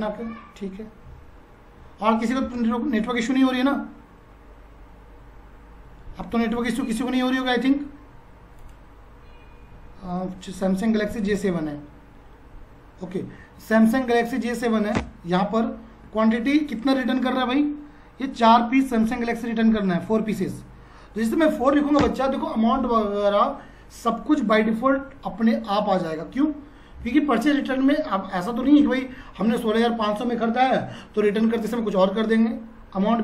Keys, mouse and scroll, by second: 2.5 space, 6.6 click, 10.8 click, 13.2 Down, 15.0 Return, 16.7 click, 19.7 click, 21.6 4, 22.0 Return, 26.2 F4.